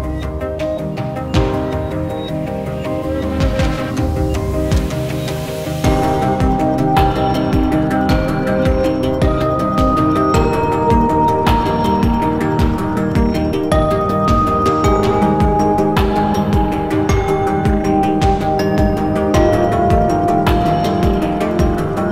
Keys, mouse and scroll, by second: 1.9-6.1 scroll down 1, 6.1-6.4 scroll up 1, 6.4-6.9 scroll down 1, 7.0 alt+click, 7.3 alt+middle click, 7.7 alt+click, 8.1 scroll down 1, 8.6 alt+middle click, 9.0 alt+click, 10.9-15.8 scroll down 1, 18.9 alt+scroll down 1, 18.9 alt+click.